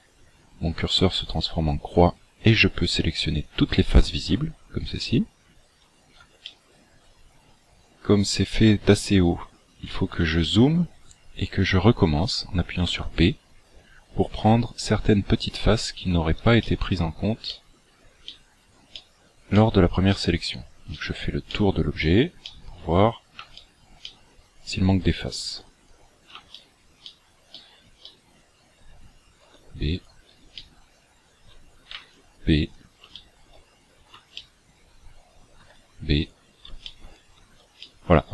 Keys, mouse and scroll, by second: 5.7 scroll up 4, 6.5 shift+middle click, 7.5-7.9 scroll up 2, 8.5 shift+middle click, 9.8 scroll up 2, 10.5 shift+middle click, 12.9 b, 16.5 shift+middle click, 17.5 shift+middle click, 18.1 shift+middle click, 18.9 shift+middle click, 19.5 shift+middle click, 20.1 shift+middle click, 20.9 shift+middle click, 21.5 shift+middle click, 22.0 shift+middle click, 22.3 shift+middle click, 23.0 scroll down 2, 23.5 shift+middle click, 23.9 shift+middle click, 25.5 b, 26.5 shift+middle click, 27.1 shift+middle click, 27.5 shift+middle click, 28.0 shift+middle click, 29.3 b, 30.5 shift+middle click, 31.9 b, 33.1 shift+middle click, 33.7 scroll down 5, 34.3 shift+middle click, 35.5 b, 36.9 shift+middle click, 37.7 shift+middle click.